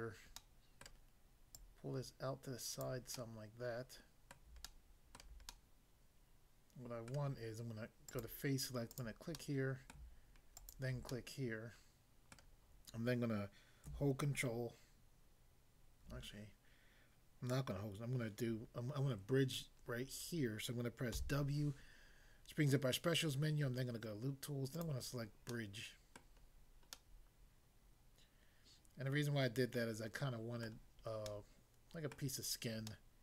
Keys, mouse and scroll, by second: 0.4 middle click, 0.9 middle click, 1.6 click, 2.9 click, 3.2 middle click, 4.4 middle click, 4.6 shift+middle click, 7.1 middle click, 8.1 click, 9.3 click, 9.3 middle click, 10.0 middle click, 10.6 shift+click, 11.1 middle click, 12.4 middle click, 21.2 w, 24.8 click, 25.5 middle click, 26.1 middle click, 26.4 scroll down 1, 30.6 middle click, 31.3 middle click, 32.1 middle click, 32.9 middle click.